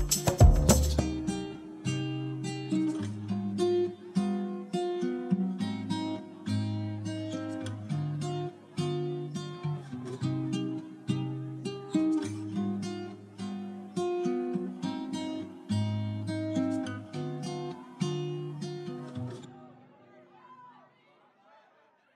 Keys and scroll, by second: 4.8 ctrl+c, 6.4 ctrl+v, 7.0 v, 10.6 u, 11.3 o, 15.5 ctrl+d, 16.2 d, 17.4 ctrl+d, 18.2 ctrl+d.